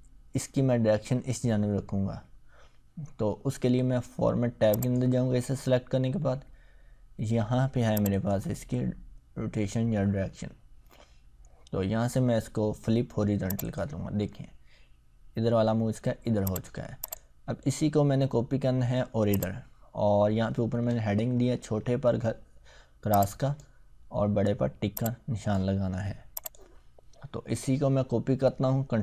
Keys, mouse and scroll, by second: 4.7 click, 7.9 click, 13.5 click, 16.5 click, 19.3 click, 21.3 ctrl+scroll up 1, 23.2-23.8 drag.